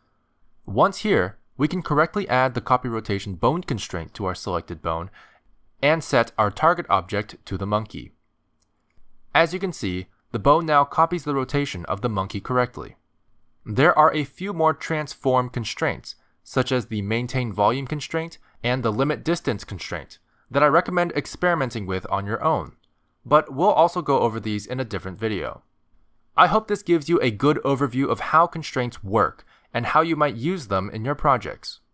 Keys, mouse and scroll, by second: 1.8 ctrl+Tab, 2.6 click, 5.3 click, 7.6 click, 10.4 ctrl+Tab, 10.7 click, 11.5 r, 11.9 r, 16.5 ctrl+Tab, 16.5 click, 17.2 click, 25.4-25.8 scroll down 1, 25.8 middle click.